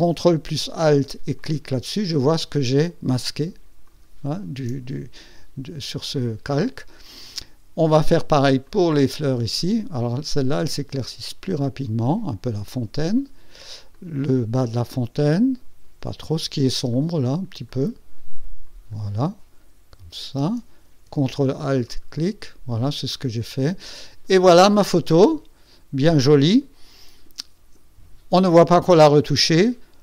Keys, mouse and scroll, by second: 1.3 ctrl+alt+click, 3.8 ctrl+alt+click, 8.6-17.6 drag, 18.1 click, 18.9-20.6 drag, 21.8 ctrl+alt+click, 23.0 ctrl+alt+click.